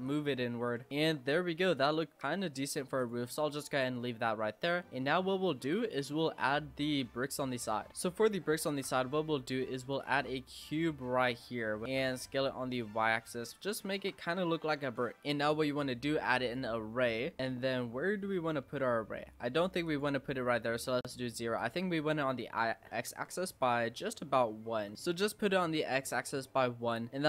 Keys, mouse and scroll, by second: 0.6 i, 1.0 e, 2.2 s, 2.8 Tab, 3.0 click, 3.3 scroll down 5, 3.4-4.0 middle drag, 4.0-4.3 scroll down 5, 4.3-4.7 middle drag, 4.7 scroll up 1, 4.9-8.3 middle drag, 8.3-8.7 scroll up 1, 8.7 shift+a, 10.2 Tab, 10.6-11.3 scroll down 5, 11.3-11.9 scroll up 4, 11.9 s, 13.6 shift+middle click, 14.3 s, 15.2 ctrl+z, 16.6-18.1 drag, 19.9-21.7 drag, 22.0-24.7 drag, 24.9-27.2 middle drag.